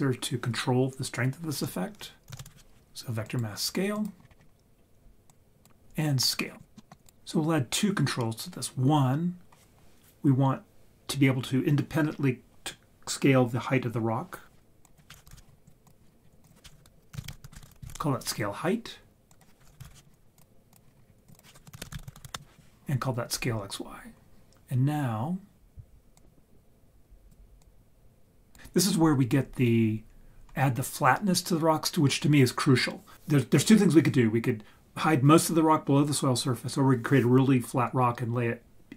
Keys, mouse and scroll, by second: 3.9 click, 4.2-4.9 scroll down 4, 4.4-4.9 scroll up 2, 5.3 click, 6.8 click, 6.8 middle drag, 14.8-15.7 drag, 16.3 scroll down 2, 16.5 click, 19.3-20.4 drag, 20.7 click, 21.1 scroll down 2, 21.3 click, 26.1-27.3 drag, 27.6 click.